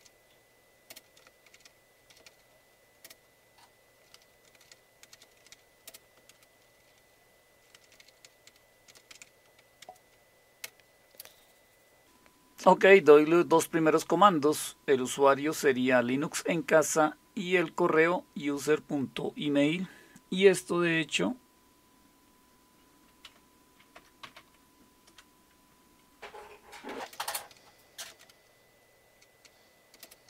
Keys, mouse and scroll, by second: 0.0-6.3 typing, 7.6-9.8 typing, 10.6 Return, 23.3-24.9 typing, 25.1 Return, 26.7-28.1 typing, 28.2 Return, 29.2-30.2 typing.